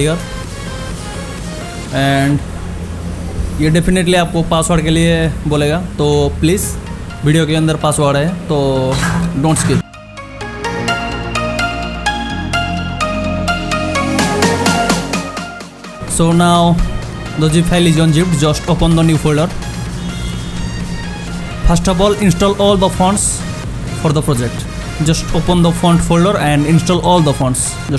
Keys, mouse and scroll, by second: 0.2 click, 12.8 click, 19.3 click, 26.2 click.